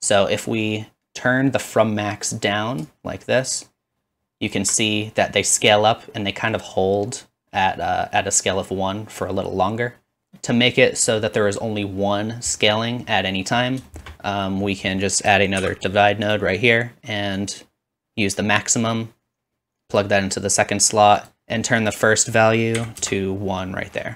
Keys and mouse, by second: 3.4 shift+click, 7.0-10.2 drag, 15.1 shift+click, 15.5-17.4 shift+middle drag, 15.6 shift+d, 17.4-24.1 drag, 21.4 ctrl+z.